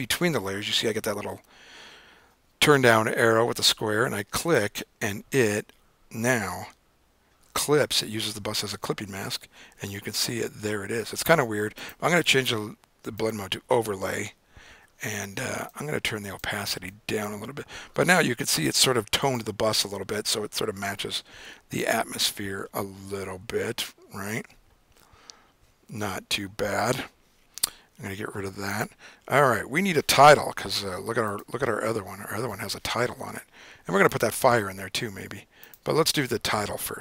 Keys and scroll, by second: 7.8 super+d.